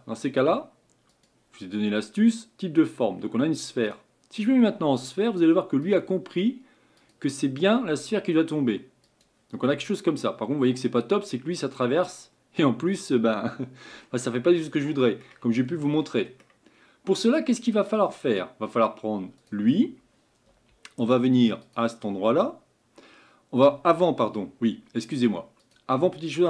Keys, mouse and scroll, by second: 1.1-4.1 drag, 5.8-9.6 drag, 9.6-12.7 middle drag, 16.0-17.3 middle drag, 17.3-17.7 scroll down 2, 17.7-19.4 middle drag, 19.4 click, 21.6 click, 25.6 click.